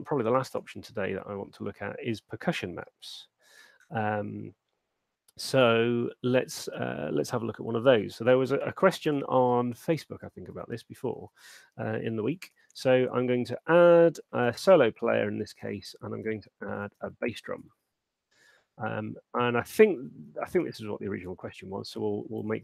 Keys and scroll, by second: 10.9 super+1, 12.6 shift+p, 14.2-15.9 typing, 17.0 u, 17.8 Return, 20.2 super+2.